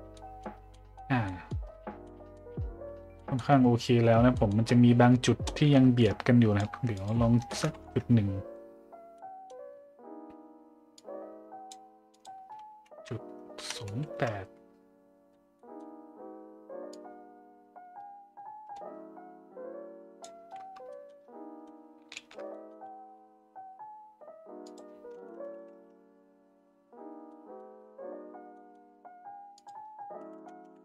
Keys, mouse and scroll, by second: 0.1 middle drag, 0.7 middle drag, 1.2 middle drag, 2.0-2.3 middle drag, 3.1 middle drag, 4.3 middle click, 6.1 shift+click, 7.0-8.6 drag, 9.1-9.5 middle drag, 11.0 click, 12.2-14.5 drag, 15.6 middle drag, 16.9-20.2 drag, 20.9 middle click, 22.2 shift+z, 22.5 middle drag, 24.7-26.8 drag, 27.3 middle drag, 28.6 middle drag, 29.6-30.8 drag.